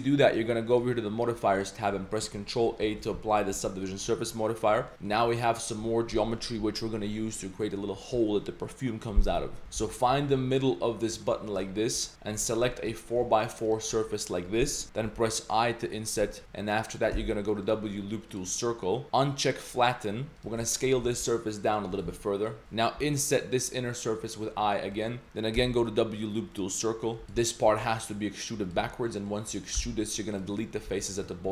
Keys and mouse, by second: 0.7 click, 2.8 ctrl+a, 3.1 Tab, 3.7 Tab, 3.7 drag, 4.1 shift+drag, 4.8 drag, 5.2 3, 5.4 click, 9.8 alt+2, 9.9 alt+click, 10.4 middle click, 11.2 shift+middle click, 11.2 typing, 11.5 shift+middle click, 12.0 middle drag, 12.4 typing, 12.9 click, 13.7 ctrl+shift+click, 15.0 i, 16.4 Tab, 17.1 w, 19.4 click, 20.3 s, 20.7 ctrl+shift+click, 21.0 s, 22.1 Tab, 22.2-22.5 middle drag, 22.6 Tab, 23.0 i, 25.6 w, 26.9-27.2 drag, 27.2 s, 27.4 click, 27.7 e, 28.8 z, 28.9-29.3 drag, 29.7 x, 30.9 z, 31.1 click, 31.3 shift+drag.